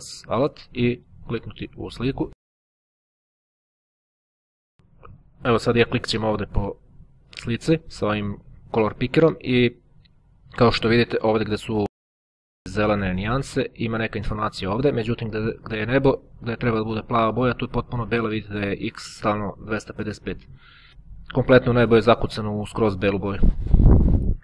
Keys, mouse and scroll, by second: 3.0-4.4 drag, 4.7 click, 9.0-12.6 drag, 13.2-16.9 drag, 18.4 click, 21.0 click, 22.6-24.4 drag.